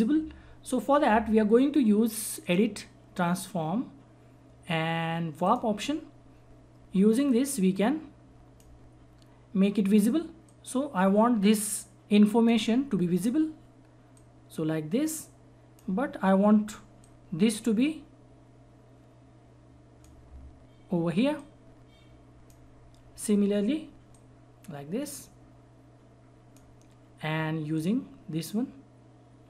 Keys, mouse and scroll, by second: 2.4 click, 5.5-29.4 drag.